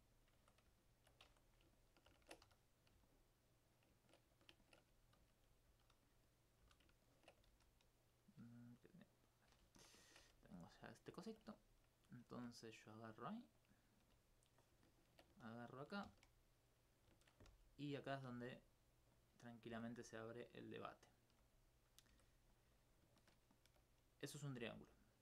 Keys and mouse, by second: 0.2 click, 0.4 Tab, 0.8 alt+click, 1.2 alt+click, 1.8 ctrl+alt+click, 3.1 alt+click, 3.3 alt+click, 4.3 alt+click, 6.4 right click, 6.6 right click, 7.0 ctrl+click, 8.2 right click, 9.2 click, 10.9 click, 11.2 alt+click, 11.8 right click, 12.3 right click, 13.6 click, 14.0 click, 14.6 right click, 16.1 shift+f, 16.7 right click, 17.6 right click, 17.8 right click, 18.3 right click, 19.2 click, 19.5-20.6 right drag, 20.6 right click, 20.6 click, 21.0 right click, 21.3 right click, 21.8 right click, 22.1 right click, 22.5 click, 22.8 alt+click, 23.0 alt+click, 24.1 right click, 24.5 right click, 24.7 click.